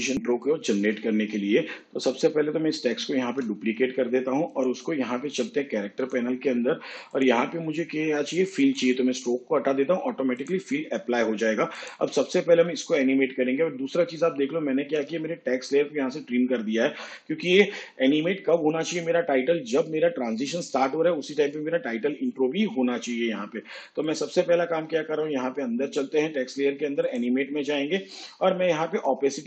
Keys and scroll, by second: 3.2 ctrl+d.